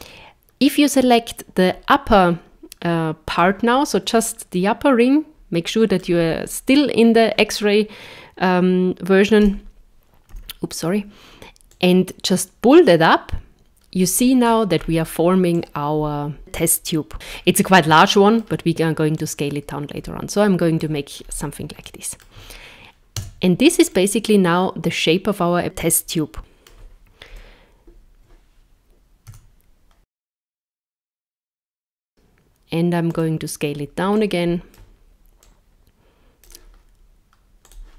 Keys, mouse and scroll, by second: 3.4 click, 4.5 middle click, 9.5 KP_0, 10.3 KP_1, 11.7 click, 14.4-15.6 scroll down 7, 15.6 click, 17.1 scroll up 2, 17.3 scroll down 4, 18.0 shift+middle click, 19.2 click, 21.2 scroll up 2, 21.8 shift+middle click, 23.2 Tab, 23.9 middle click, 27.3 KP_0, 29.4 s, 34.2 click, 35.4 click, 37.7 click.